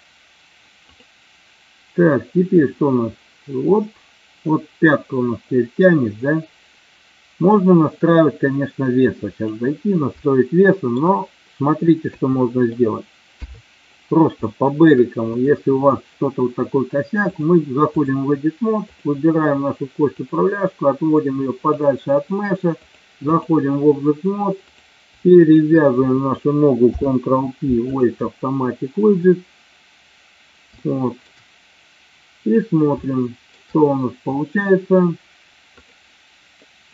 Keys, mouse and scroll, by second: 1.0-1.5 drag, 2.6-9.6 drag, 10.2-11.0 shift+middle drag, 12.1 KP_2, 13.5 KP_3, 14.7 shift+middle click, 17.3-18.2 drag, 19.0 click, 20.2-22.0 drag, 22.9 click, 25.5 shift+click, 26.9 ctrl+p, 30.9-31.3 shift+middle drag, 33.1 shift+middle click, 35.9 click.